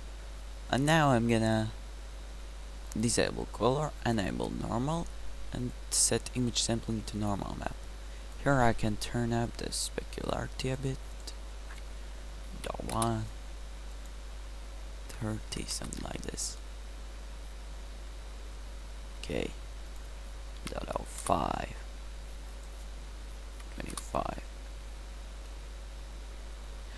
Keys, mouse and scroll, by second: 16.3 middle click, 17.0-17.7 middle drag, 18.0 middle click, 18.2-19.9 middle drag, 21.4-21.7 drag, 22.6-24.4 drag, 25.1 middle drag, 25.5-25.9 middle drag.